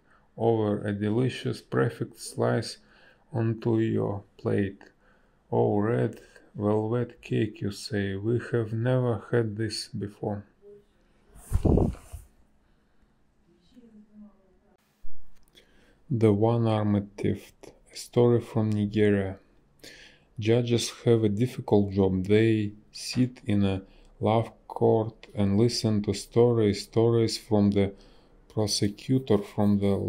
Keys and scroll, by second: 3.2 space, 4.3 space, 7.3 ctrl+z, 9.3 space, 11.8 space, 18.8 space, 24.1 ctrl+z, 24.5 ctrl+z, 24.6 space.